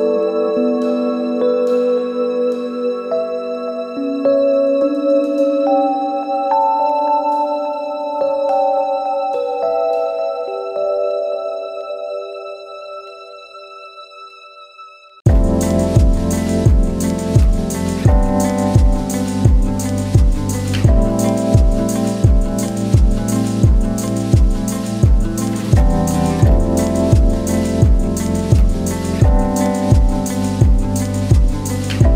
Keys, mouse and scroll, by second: 9.5 click, 14.2 ctrl+Num_Lock, 14.2 click, 14.5 ctrl+z, 15.5 click, 28.7-32.1 drag.